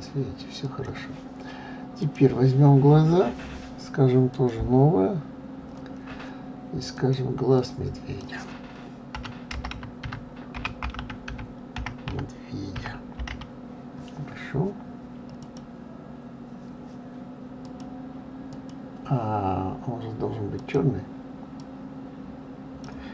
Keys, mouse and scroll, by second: 0.6 click, 2.0 click, 4.3 click, 6.9-10.0 drag, 17.6 click, 18.5 click, 20.6 click.